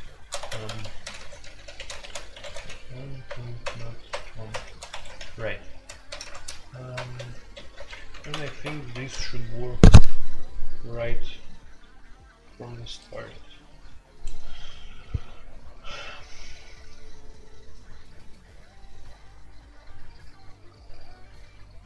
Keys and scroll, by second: 0.0-4.5 typing, 4.9 Escape, 5.0 F2, 5.9-8.2 typing, 8.5 alt+p, 8.9 Return.